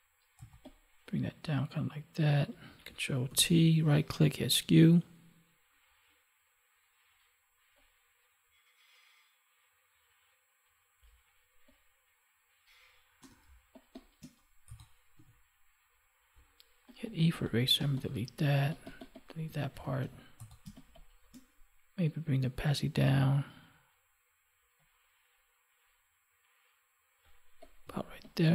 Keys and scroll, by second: 3.3 ctrl+t, 13.4 space, 19.6 ctrl+1, 20.6 space, 27.9 space.